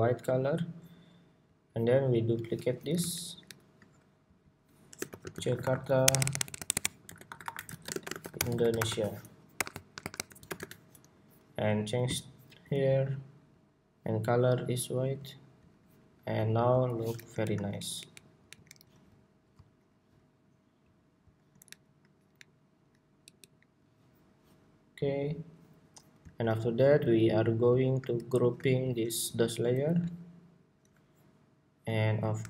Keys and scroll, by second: 2.1 super+d, 11.2 Escape, 17.1 alt+shift+Down, 17.5 alt+Up, 17.8 alt+Up, 21.4 alt+shift+Up, 22.1 alt+Up, 24.1 alt+Down, 28.1 super+g.